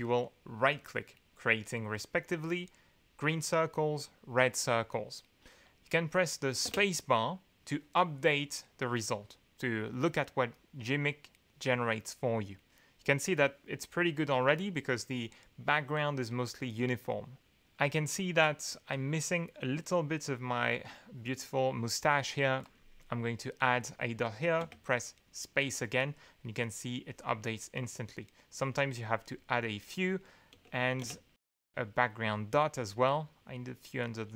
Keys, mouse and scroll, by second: 0.0 right click, 0.7 right click, 6.6 space, 22.6 click, 24.6 space, 27.8 click, 29.2 right click, 31.0 space, 33.1 click, 33.8 click.